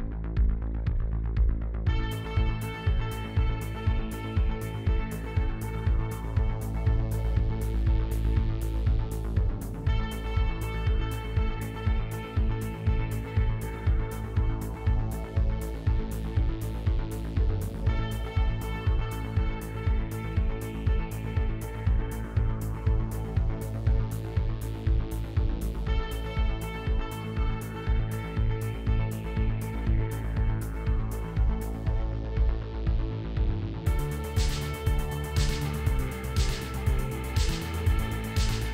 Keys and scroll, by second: 17.5 f.